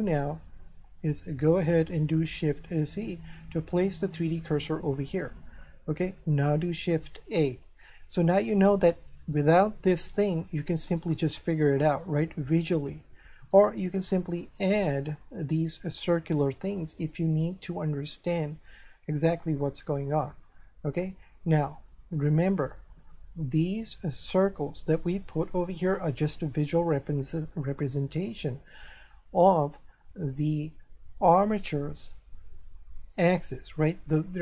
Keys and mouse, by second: 1.0 shift+middle click, 2.7 shift+c, 5.4 shift+middle click, 7.4 shift+a, 10.6 right click, 13.4 right click, 14.9 shift+middle click, 20.6 shift+middle click, 24.5 click, 26.5 right click.